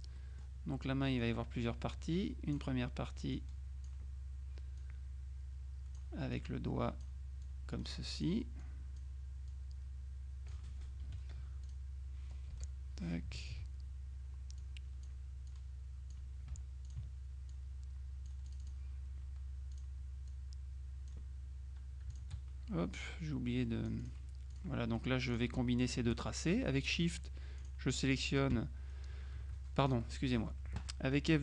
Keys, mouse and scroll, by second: 0.2 middle click, 1.3-3.1 drag, 3.4-4.4 drag, 4.8-6.5 drag, 7.5 click, 8.7 click, 9.6-11.1 drag, 11.1 F2, 11.8 click, 12.6 Delete, 13.5 ctrl+click, 14.7 click, 17.0 ctrl+click, 17.6-19.3 ctrl+drag, 19.8-21.7 drag, 22.2 shift+click, 23.2 click, 25.4 shift+click, 26.0 shift+click, 27.2 click, 30.0 shift+click.